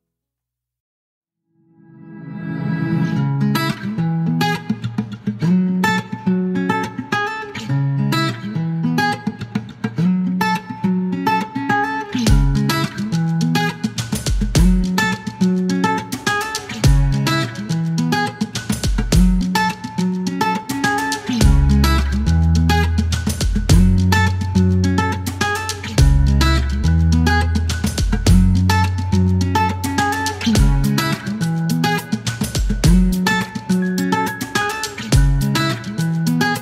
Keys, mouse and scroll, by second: 5.9 click, 12.1 click, 14.7 click, 16.5 click, 21.0 click, 22.8 click, 25.0 click, 26.7 click, 27.8 click, 28.4 click, 29.0 click, 30.9-31.4 scroll down 2, 32.1 scroll down 1, 32.7 scroll up 2, 34.6 click.